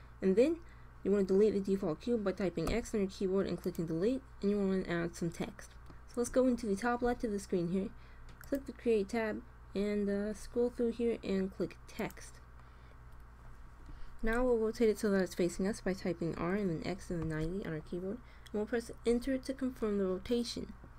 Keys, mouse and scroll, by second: 2.5 x, 8.3-10.2 drag, 10.2-11.9 middle drag, 11.9-13.6 drag, 16.2 r.